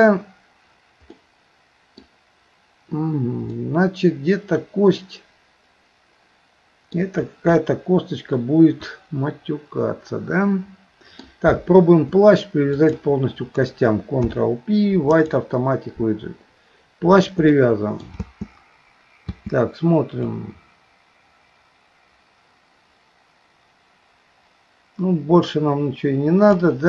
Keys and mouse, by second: 1.2 middle click, 3.6-7.0 middle drag, 7.6-11.3 middle drag, 12.8 shift+click, 14.2 ctrl+p, 17.6 middle click, 18.3 space, 19.3 space, 20.3-26.6 drag.